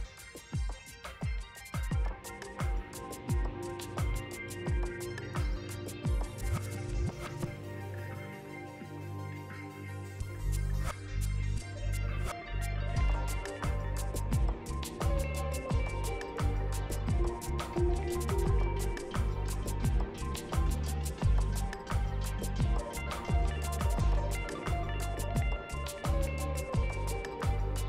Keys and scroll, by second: 12.6 ctrl+z, 14.0 ctrl+z.